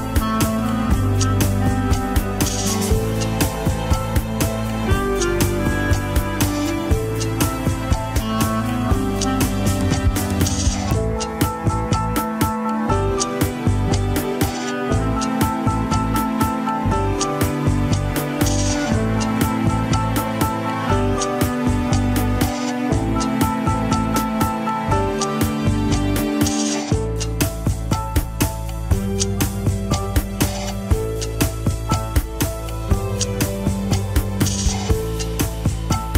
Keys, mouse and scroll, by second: 1.4 KP_1, 2.0 ctrl+Tab, 3.4 click, 3.8 click, 4.2 scroll up 1, 5.1 scroll down 1, 5.5 Tab, 5.8 alt+z, 6.1 KP_3, 6.4-6.8 scroll up 2, 6.8 click, 7.1 g, 10.5 click, 10.9 g, 13.0 click, 13.3 g, 14.1-14.5 scroll down 1, 14.5 click, 14.8 g, 15.7 scroll down 1, 16.5 scroll up 1, 17.8 click, 18.4 shift+click, 20.1 ctrl+p, 22.3 KP_1, 23.3 alt+z, 24.1 ctrl+Tab, 24.7 alt+z, 29.0 Tab, 30.0 click, 30.5 KP_3, 30.8-31.1 scroll up 1, 31.1 g, 35.2 click, 35.7 shift+click.